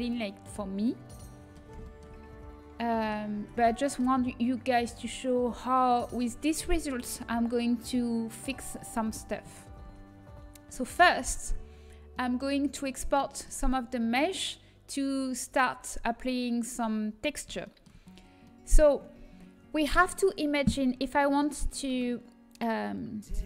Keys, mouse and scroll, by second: 1.8-3.3 middle drag, 3.3 Tab, 5.0 a, 9.8 Tab, 14.3-17.0 middle drag, 17.6-22.4 middle drag.